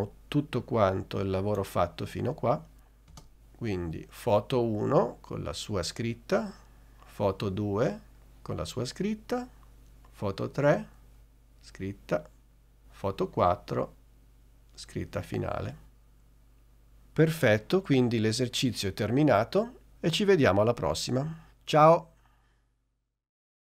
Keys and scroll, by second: 3.3 space.